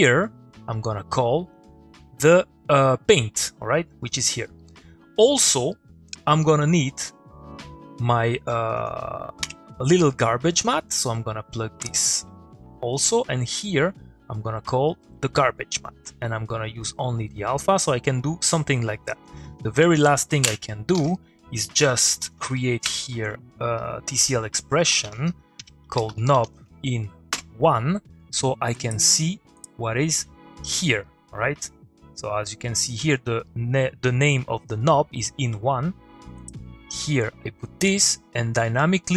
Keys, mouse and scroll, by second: 0.5-4.0 drag, 4.6 middle click, 6.2 click, 6.4 middle click, 7.1 click, 8.8 Tab, 10.5-11.6 drag, 13.9-15.2 click, 16.4-17.3 drag, 19.0 click, 22.1 click, 24.7-27.4 typing, 28.7 click, 36.4 click.